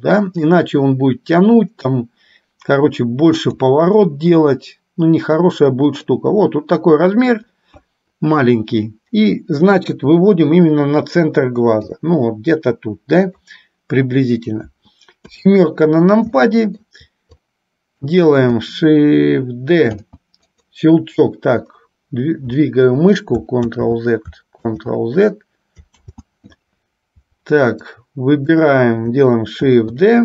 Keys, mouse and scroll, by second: 0.7-3.7 drag, 4.2-6.3 middle drag, 9.9 KP_3, 11.9-13.4 drag, 15.3 KP_7, 16.4 shift+middle click, 17.4 click, 20.1 shift+d, 23.7 ctrl+z, 28.1 click, 29.7 shift+d.